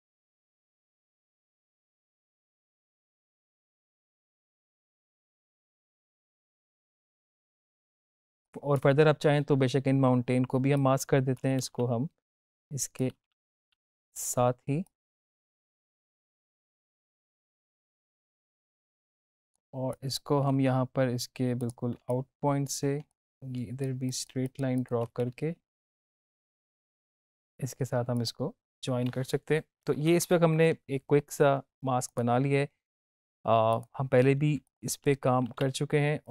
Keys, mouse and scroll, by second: 0.3 ctrl+z, 0.4 click, 0.8 alt+click, 0.9 click, 1.0 space, 1.0 click, 1.2 alt+click, 1.5 space, 1.6 click, 1.8 space, 1.9 click, 2.4 alt+click, 2.5 space, 2.6 click, 2.8 ctrl+z, 3.0 alt+click, 3.4 ctrl+shift+z, 3.5 click, 4.6 space, 4.7 click, 4.9 space, 5.0 click, 5.6 ctrl+z, 5.8 click, 5.8 space, 6.0 click, 6.4 space, 6.6 ctrl+-, 6.7 ctrl+=, 6.8 click, 6.9 ctrl+=, 7.0 ctrl+-, 7.1 drag, 12.6 space, 13.0 click, 13.1 space, 14.7 ctrl+z, 14.8-15.1 click, 15.7 space, 15.8 click, 16.3 ctrl+=, 16.6 space, 16.6 click, 16.7 space, 16.9 ctrl+-, 17.4 click, 17.6 ctrl+-, 17.6 click, 17.9 space, 18.2 space, 18.2 click, 18.6 space, 18.6 click, 19.2-19.5 space, 21.5 click, 22.0 space, 22.0-22.6 click, 22.4 space, 23.1-24.0 click, 23.5 space, 25.8 shift+click, 26.4 space, 26.5-27.1 click, 27.0 space, 28.1 click, 29.9 ctrl+-, 32.0 click, 35.0 ctrl+z, 36.2 click.